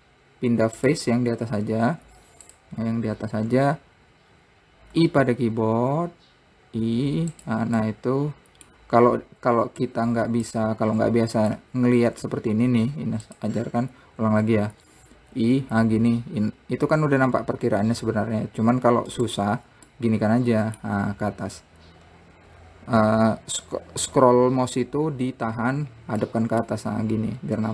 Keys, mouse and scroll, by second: 1.2 click, 2.3 `, 3.6 scroll up 1, 8.2-10.3 middle drag, 10.3-11.9 drag, 11.9-13.1 middle drag, 13.1 `, 14.6 ctrl+z, 20.3-23.3 middle drag, 26.6-27.7 middle drag.